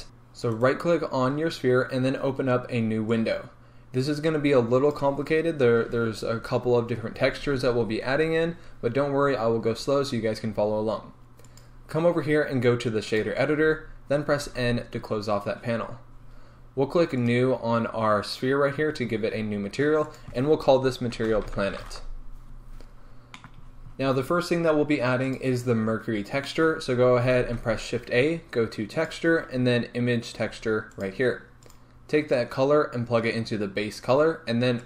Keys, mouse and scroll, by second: 0.0 right click, 0.7 right click, 3.2-17.7 drag, 14.5 n, 15.9-16.8 scroll down 1, 18.9 scroll up 1, 20.1-23.4 drag, 22.0 t, 22.2 Return, 23.4-31.8 middle drag, 23.7-26.5 scroll up 2, 27.1-27.5 scroll down 2, 27.5 shift+a, 31.8 click, 32.4 click.